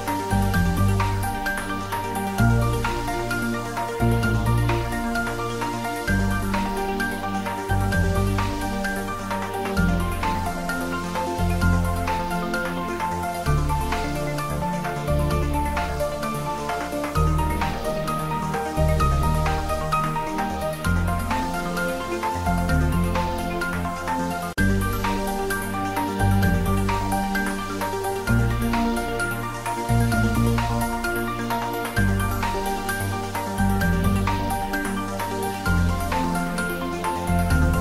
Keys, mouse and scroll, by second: 0.0 click, 0.4-0.8 scroll up 1, 0.8 s, 1.6 click, 1.7 scroll down 1, 2.1 s, 2.6 click, 2.7-3.4 scroll up 1, 3.4 middle click, 3.8 Tab, 3.9 a, 4.5 alt+e, 5.1 click, 6.7 ctrl+z, 7.8 alt+e, 8.1 click, 9.6 s, 12.0 click, 12.2 Tab, 12.4-12.7 scroll down 1, 12.7-14.1 middle drag, 15.3 middle click, 15.5 middle click, 15.9-16.4 scroll up 1, 16.5 shift+a, 17.6 click, 18.7 s, 19.6 click, 20.0 g, 20.7 click, 21.0 s, 21.8 click, 21.9 s, 22.5 click, 23.7 g, 24.0 click, 24.2 shift+z, 24.7 middle click, 25.5 click, 26.8 shift+z, 27.1 click, 27.5 scroll up 1, 27.7 click, 28.6 g, 29.9 click, 31.1 click, 32.4 s, 34.8 click, 35.4-36.7 middle drag, 36.7 shift+z, 37.6 ctrl+3.